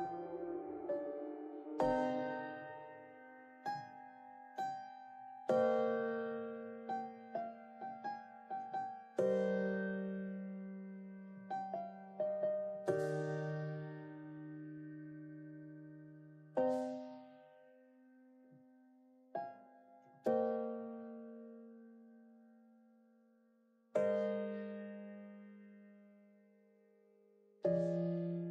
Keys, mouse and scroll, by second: 0.3 scroll up 3, 0.6 g, 2.1 s, 3.2 click, 4.9 2, 5.1 alt+click, 5.3 alt+click, 5.5 alt+click, 5.8 alt+click, 6.0 alt+click, 6.4 g, 7.1-8.1 shift+middle drag, 8.1-8.6 ctrl+z, 8.7 ctrl+z, 8.8 ctrl+z, 9.0 ctrl+z, 9.6 click, 10.1 KP_1, 10.5 g, 11.3 s, 11.7 g, 12.4 click, 12.8 g, 13.7 r, 14.2 KP_3, 14.8 alt+z, 15.5 KP_1, 15.9 g, 16.6-17.0 middle drag, 17.0 ctrl+r, 17.7-18.3 middle drag, 18.3 ctrl+r, 19.2 middle click, 19.8 alt+z, 19.9 KP_3, 20.4 click, 20.6 alt+z, 20.8 scroll down 2, 20.9-22.0 middle drag, 22.1 scroll down 2, 22.2 middle click, 22.4-22.8 scroll up 5, 22.8 ctrl+r, 23.4 scroll down 2, 23.6 middle click, 24.0 KP_3, 24.5 alt+z, 24.7 shift+middle click, 24.9 scroll down 2, 25.2 shift+middle click, 25.4 scroll up 3, 25.6 scroll down 3, 25.8-26.8 shift+middle drag, 26.8 l, 28.4 shift+d.